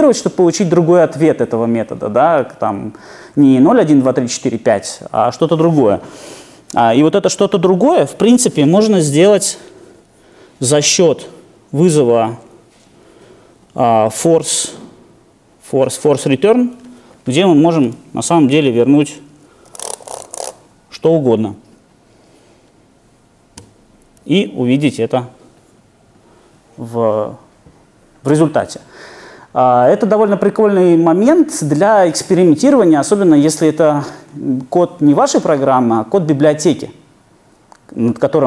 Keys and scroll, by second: 23.6 alt+super+r.